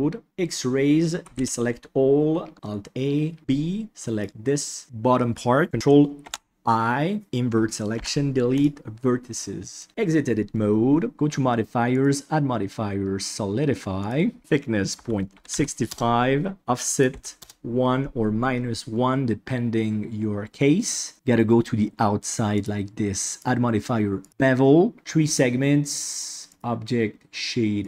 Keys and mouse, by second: 0.2 alt+z, 1.2 alt+a, 3.4 b, 6.2 ctrl+i, 7.9 Delete, 9.9 Tab, 12.0-14.1 drag, 14.4-15.9 drag, 17.0 click, 22.5 click, 23.3-24.3 drag, 26.5-27.8 drag.